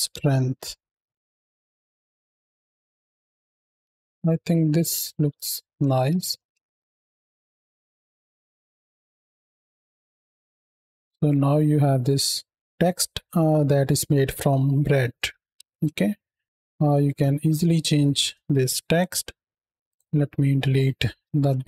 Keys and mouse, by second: 1.2-3.4 middle drag, 3.4 ctrl+space, 6.0 shift+Left, 6.4 space, 10.1 space, 10.7 space, 10.9 space, 15.5 ctrl+space, 18.2 shift+middle click, 18.9 middle click, 19.7 click, 20.2 middle click, 21.4 shift+Left.